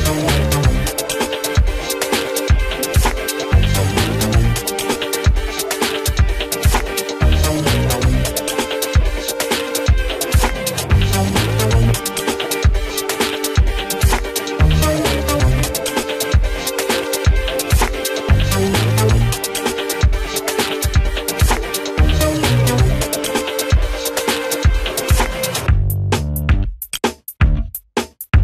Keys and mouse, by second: 6.1 Tab, 7.5 click, 8.4 Tab, 9.8 click, 15.5 h, 16.3 ctrl+space, 16.5 g, 17.1-23.3 drag, 23.3 ctrl+space, 23.7 click, 24.5 ctrl+space, 25.2 click, 26.1 ctrl+space, 26.3 click, 27.1-28.4 right drag.